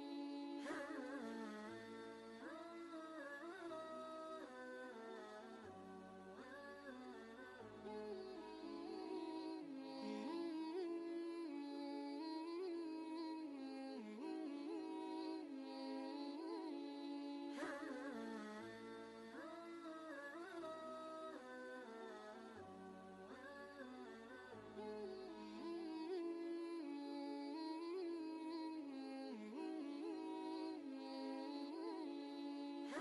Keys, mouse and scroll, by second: 1.5 click, 3.4 Left, 7.1 Left, 7.2 click, 7.6 ctrl+space, 7.7-10.5 ctrl+drag, 10.5-12.5 shift+drag, 14.0-16.9 shift+drag, 16.9 ctrl+space, 17.0 ctrl+click, 17.5 ctrl+space, 17.9 click, 18.3 ctrl+space, 18.4-19.8 ctrl+drag, 19.8-25.0 shift+drag, 27.3 e, 27.4 ctrl+space, 27.5 ctrl+click, 27.9 ctrl+space, 28.6 space, 28.7 click, 29.4 ctrl+space, 29.5 ctrl+click, 29.9 ctrl+space, 30.6 click, 31.0 space, 31.3 space, 32.0 ctrl+space, 32.1 ctrl+click, 32.5 ctrl+space.